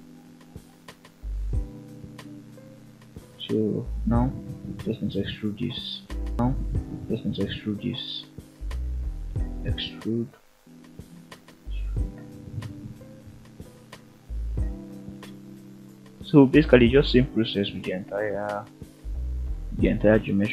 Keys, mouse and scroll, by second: 0.8 click, 1.0 scroll down 1, 1.3 middle click, 1.8-2.1 scroll up 1, 2.4 e, 3.4 click, 3.5 scroll up 1, 3.6 middle click, 4.1 e, 5.0 click, 5.3 e, 6.2 click, 6.5 e, 7.6 click, 8.1 e, 9.8 click, 9.9 scroll down 2, 10.2 middle click, 10.9 scroll up 2, 11.3 shift+middle drag, 11.7-12.1 middle drag, 12.2 scroll up 1, 13.4 e, 14.7 click, 15.2 e, 16.5 click, 16.9 e, 18.0 click, 18.2 middle click, 19.0 e, 19.7 click, 20.3 e.